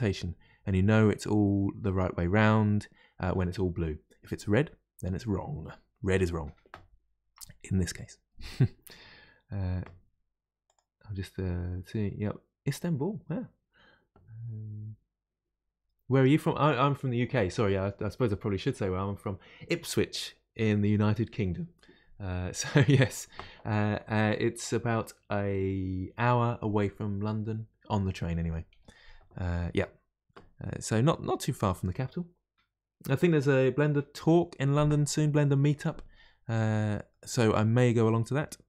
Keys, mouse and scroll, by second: 0.2-3.3 middle drag, 36.6-38.6 middle drag.